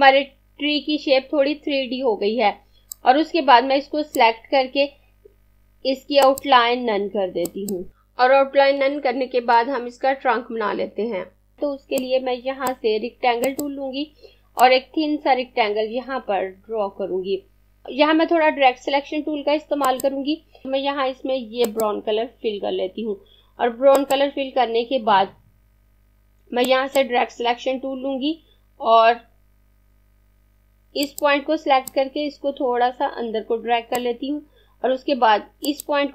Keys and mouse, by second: 2.8 click, 12.0 click, 19.8 click, 21.8 click, 26.6 click, 30.8 click.